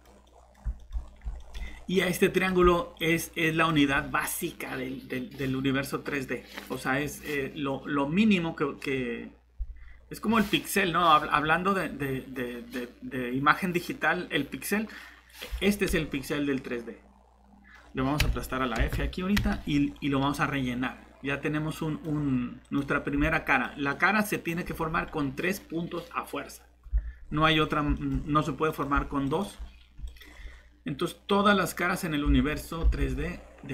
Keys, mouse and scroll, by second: 0.7-1.0 scroll up 2, 0.8 middle click, 1.4 middle click, 1.9 scroll up 1, 2.3 click, 3.1-4.3 typing, 15.9 middle click, 18.8 Escape, 18.9 Escape, 22.1 scroll up 1, 22.6 click, 23.7 typing, 27.2 scroll down 1, 27.5 scroll up 1, 27.9 middle click, 28.7 click, 32.4 alt+Tab, 33.0 Tab.